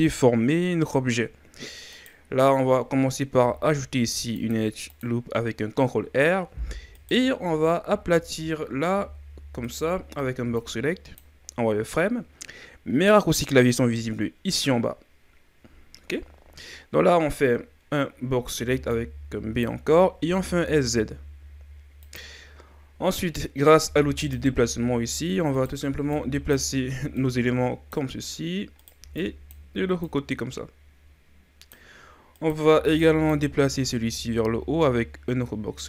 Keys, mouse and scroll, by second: 1.9 right click, 3.4 ctrl+r, 6.9 right click, 7.4 z, 7.8 z, 9.0 r, 18.6 b, 20.3 s, 24.2-25.6 drag, 25.6 right click, 26.0 b, 27.2-28.8 drag, 28.8 right click, 29.0 b, 30.1-32.4 drag, 32.4 right click, 32.7 b, 34.1-35.8 drag.